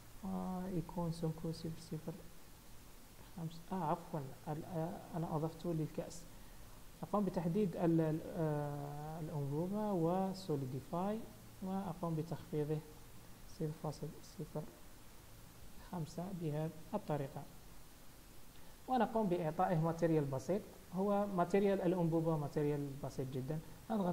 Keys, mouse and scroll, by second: 0.2 click, 5.6 click, 6.7 click, 12.9 click, 16.9-18.1 scroll down 5, 18.1 KP_1, 20.7 click, 22.0-23.1 scroll up 1, 23.1 click.